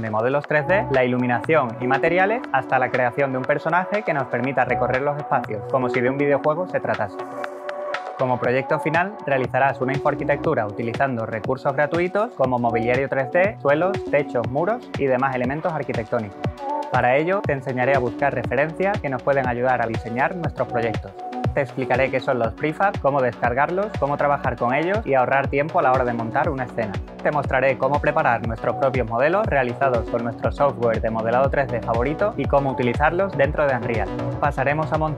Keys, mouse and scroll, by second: 0.8 click, 4.6-5.7 typing, 25.0 click.